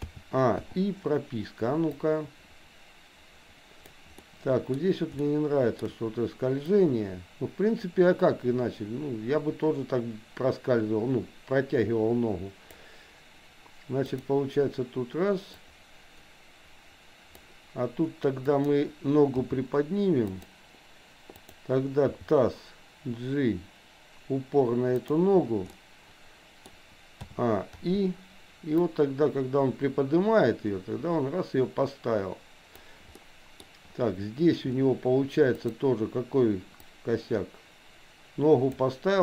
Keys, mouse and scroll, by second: 0.1 a, 0.6 i, 2.1-3.9 drag, 4.3 middle click, 5.2 shift+middle click, 6.7-12.8 drag, 14.1 click, 15.7-17.4 drag, 18.4 click, 19.4 g, 21.3 click, 22.1 g, 25.7-26.8 middle drag, 27.2 a, 27.8 i, 28.9-32.9 drag, 33.2 middle click, 35.7 click, 37.1-38.8 drag.